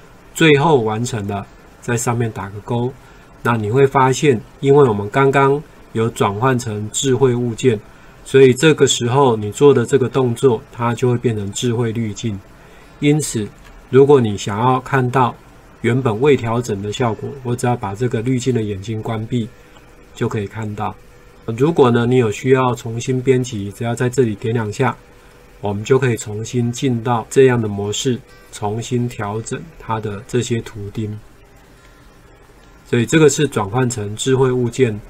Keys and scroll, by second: 4.8 ctrl+4, 13.8 ctrl+4.